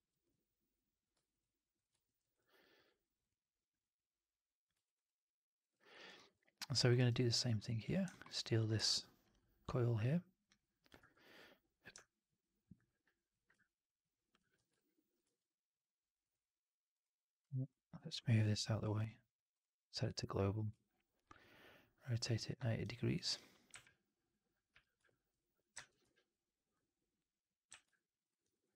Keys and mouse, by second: 1.2-1.8 shift+drag, 1.9 alt+middle drag, 2.1 alt+right drag, 2.3 alt+drag, 4.7 alt+right drag, 5.0-5.5 alt+drag, 5.6 click, 5.9 alt+right drag, 6.0 alt+right drag, 6.2 alt+drag, 6.7 alt+middle drag, 6.9 alt+right click, 8.0 alt+middle drag, 8.2 alt+right drag, 8.3 alt+drag, 8.8 ctrl+d, 10.9 e, 11.9-12.7 alt+drag, 13.5 ctrl+click, 14.4 w, 15.1 e, 17.3-22.3 drag, 25.7 ctrl+z, 25.9 w, 27.6 click, 27.6 f, 27.8-28.1 alt+drag, 28.2 alt+right drag, 28.4 alt+right click, 28.7 alt+right drag.